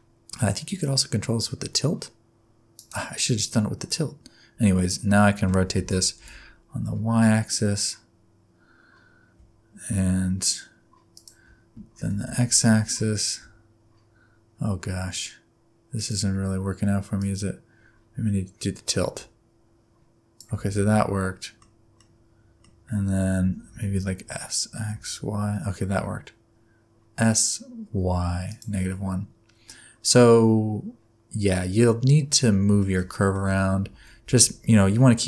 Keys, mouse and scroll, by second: 0.8 click, 5.8 r, 12.0 r, 17.2 click, 20.7 middle click, 22.0 middle click, 23.4 s, 28.9 middle click, 32.8 shift+middle click, 33.5 a, 33.9 s.